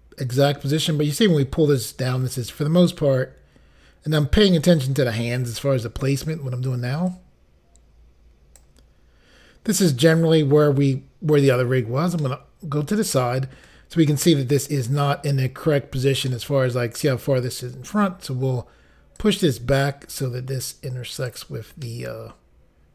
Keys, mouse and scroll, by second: 7.1 click, 12.3 middle click, 16.3 middle click, 19.2 click, 21.9 middle click.